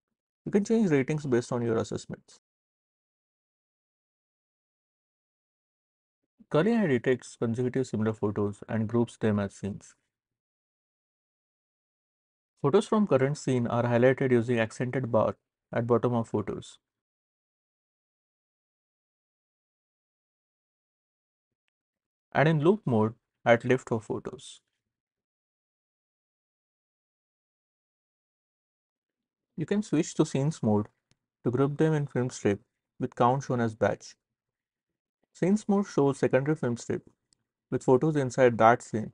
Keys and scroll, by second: 0.6 c, 2.5 3, 3.2 Right, 3.7 4, 4.3 Down, 5.3 c.